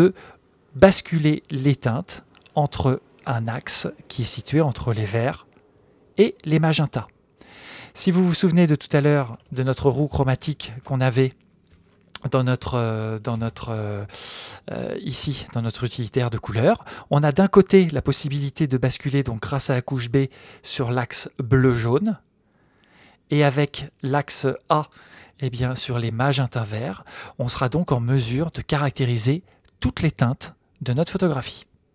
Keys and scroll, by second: 9.6 super+Tab, 13.3 super+n.